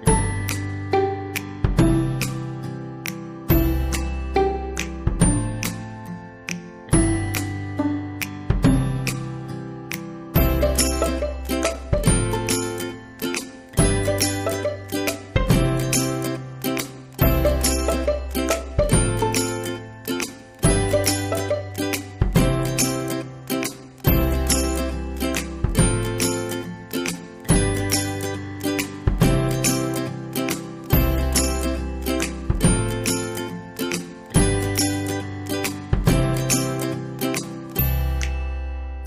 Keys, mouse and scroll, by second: 0.3 right click, 2.4 click, 8.4 click, 17.3 click, 29.7 right click, 30.5 click, 33.5-35.6 drag, 35.6 ctrl+c, 36.5 click.